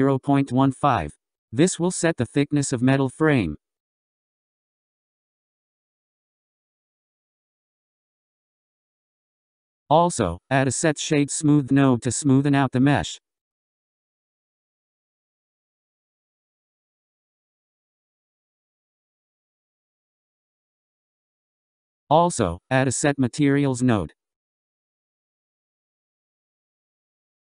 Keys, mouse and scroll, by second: 1.3 click, 4.5-5.0 scroll down 3, 5.0-6.2 scroll up 4, 6.2 click, 8.2 click, 10.2 shift+a, 19.4-20.3 scroll up 7, 20.3-20.9 scroll down 11, 21.6 click, 22.8 shift+a.